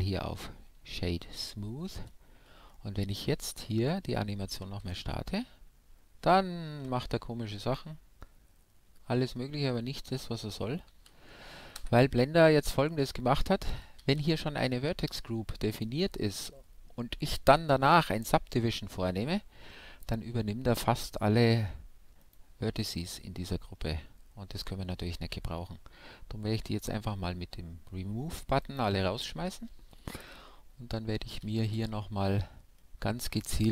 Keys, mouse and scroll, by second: 2.0 Tab, 2.3-4.6 middle drag, 4.6 alt+a, 8.5-10.1 middle drag, 10.1-10.7 scroll up 1, 10.7-12.0 middle drag, 11.0 alt+a, 11.8 shift+Left, 12.8 Tab, 13.4-15.2 middle drag, 14.0 a, 15.7-17.5 drag, 22.2 click, 22.9-24.1 middle drag, 24.1-26.0 scroll down 1, 28.6-30.3 drag, 29.3 a, 30.2 KP_1, 30.4-31.7 drag, 31.7 KP_5, 32.8-33.7 middle drag.